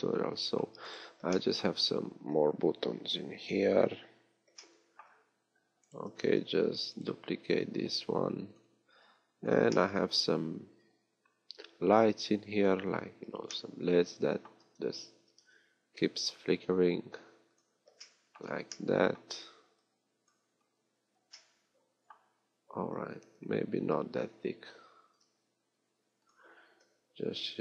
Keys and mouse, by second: 6.7 shift+d, 15.2 s, 23.7 s, 27.3 shift+d.